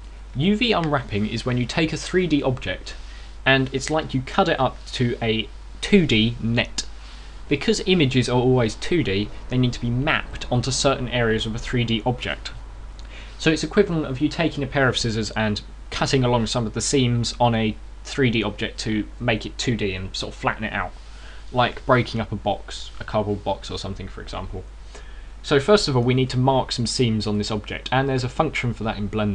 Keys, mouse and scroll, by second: 0.6-1.1 scroll down 1, 27.0 Tab, 28.2 middle click.